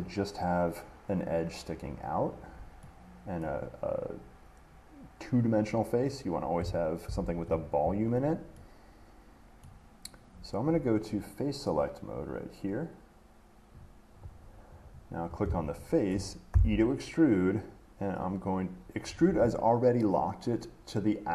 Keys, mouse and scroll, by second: 3.6 middle click, 6.8-8.9 middle drag, 7.3 ctrl+z, 9.8 middle click, 14.0 click, 15.0 click, 16.3 middle click, 16.7 e.